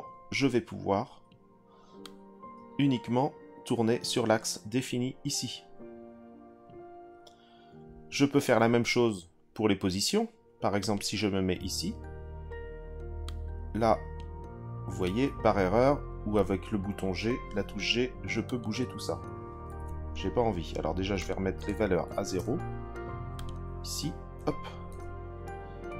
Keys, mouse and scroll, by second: 2.0 click, 10.8 click, 13.2 click, 15.0 click, 17.0 g, 18.4 click, 19.6 ctrl+z, 21.2-22.4 drag, 23.3-24.9 drag.